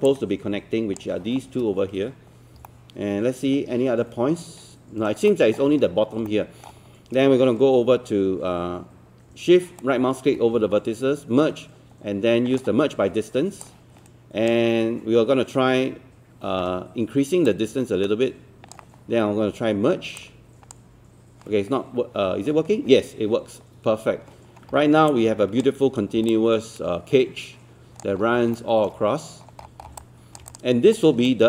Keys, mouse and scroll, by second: 0.1 shift+click, 2.7-5.1 alt+middle drag, 5.3 alt+middle click, 6.3-7.5 alt+middle drag, 9.8-13.5 shift+right drag, 13.6-21.5 drag, 24.5 scroll down 1, 25.1 click, 26.0 scroll down 1, 26.3-28.1 alt+drag, 28.2 scroll up 1, 28.6 alt+middle click, 29.0-29.4 scroll up 1, 29.4-29.9 scroll down 1, 30.0 alt+click, 30.5 click, 31.0 scroll up 1, 31.3 right click.